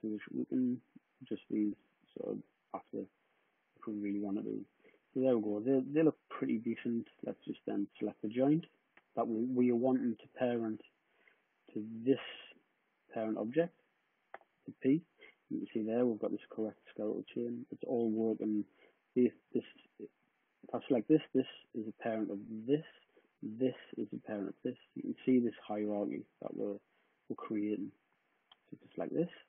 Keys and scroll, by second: 14.0 p.